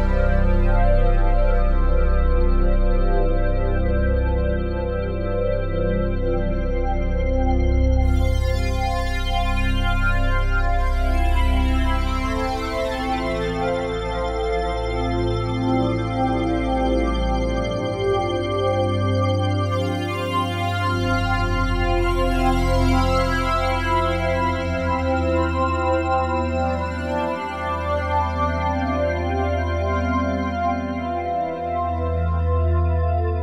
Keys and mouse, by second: 0.0 click, 1.1-2.1 ctrl+alt+drag, 2.7-6.8 ctrl+alt+drag, 6.9 ctrl+alt+click, 7.3 ctrl+alt+click, 8.3 typing, 9.3 Escape, 13.8 n, 15.6 click, 16.6-17.2 typing, 19.4 click, 20.0-21.8 alt+drag, 22.2 ctrl+alt+click, 23.0 alt+shift+click, 23.6-25.2 ctrl+alt+drag, 25.5 click, 25.7 click, 25.7 typing, 26.3 ctrl+alt+click, 27.1 alt+click, 28.4 click, 29.0 click, 30.3 right click, 31.3 click, 31.8 typing, 32.6 shift+click.